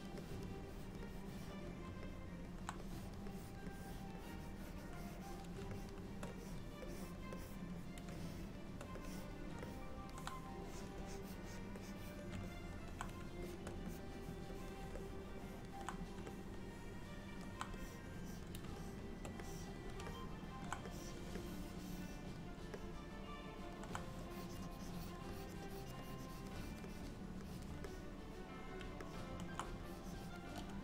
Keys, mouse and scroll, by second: 0.3 click, 0.7 click, 1.2 click, 2.1 middle click, 2.9 click, 3.4 click, 3.8 click, 4.3 click, 5.8 shift+click, 6.0 shift+click, 6.4 click, 6.9 click, 7.4 click, 8.1 shift+click, 8.3 shift+click, 9.1 click, 9.7 middle click, 10.7 click, 11.1 click, 11.9 click, 12.5 middle click, 13.5 shift+click, 13.6 shift+click, 14.0 click, 14.6 click, 14.9 shift+click, 15.1 middle click, 16.4 middle click, 17.9 click, 18.3 click, 18.8 shift+click, 19.2 shift+click, 19.5 click, 20.2 middle click, 21.2 click, 21.4 click, 22.8 middle click, 24.3 click, 24.8 click, 25.4 click, 25.8 click, 26.1 click, 26.3 click, 26.7 click, 27.0 click, 27.5 click, 28.0 middle click, 29.1 ctrl+middle click, 29.9 click.